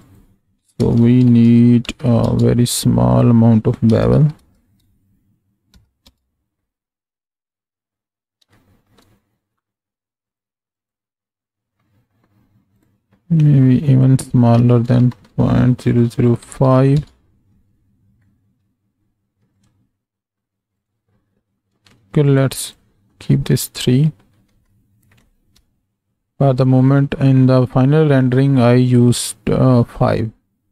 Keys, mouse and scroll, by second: 0.0-6.6 drag, 8.6 shift+middle click, 10.3 click, 10.8 click, 12.9-17.5 drag, 18.2-18.6 middle drag, 19.5 click, 20.8 click, 22.6 click, 23.6-24.1 middle drag, 24.5 alt+a, 25.5 KP_0.